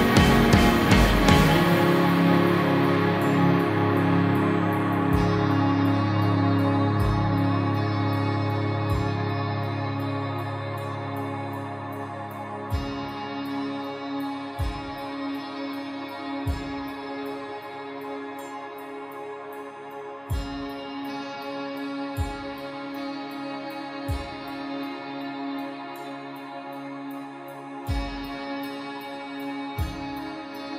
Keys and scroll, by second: 6.3 ctrl+-, 6.9 ctrl+0, 9.2 space, 27.3 space.